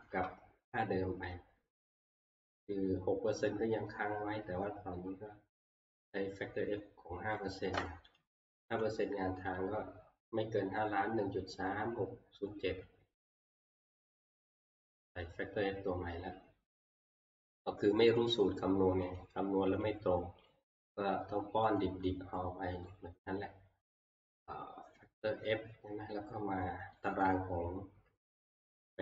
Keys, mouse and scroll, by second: 0.1 Escape, 1.3 scroll, 3.3 scroll, 4.1-4.4 scroll, 4.5-5.6 scroll down 13, 8.2 click, 9.6 click, 13.3 scroll down 3, 13.4-14.8 scroll, 15.7 scroll, 18.2 click, 19.2 click, 20.0 click, 20.5 click, 21.8 click, 22.9 click, 27.1 click.